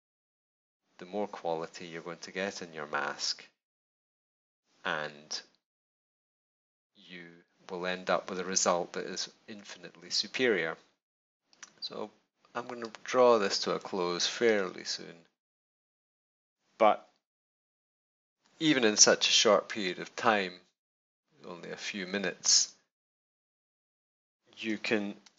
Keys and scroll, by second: 17.2 super+-, 25.2 super+z.